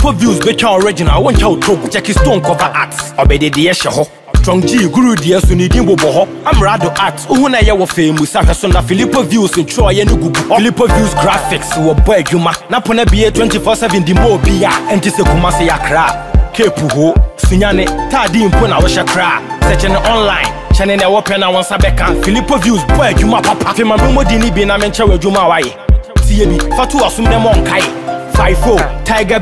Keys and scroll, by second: 12.2 ctrl+t, 17.9 Return, 28.3 ctrl+t.